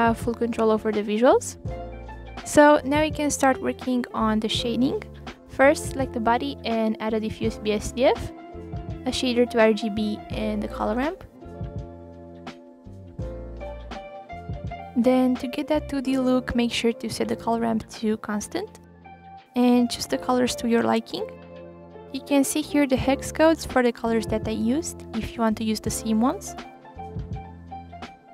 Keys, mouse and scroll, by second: 0.9 click, 1.5 Delete, 1.9-2.7 scroll up 3, 4.9 shift+a, 9.5-9.8 drag, 12.3 shift+a, 13.1 click, 14.3-14.7 drag, 16.2-20.6 drag, 25.8 f, 27.7 click.